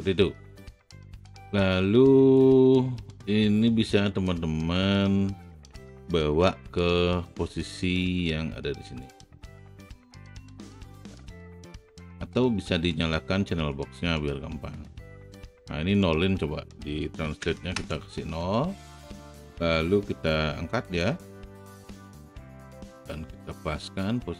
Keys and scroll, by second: 6.6 w, 17.6 KP_0, 17.7 Return.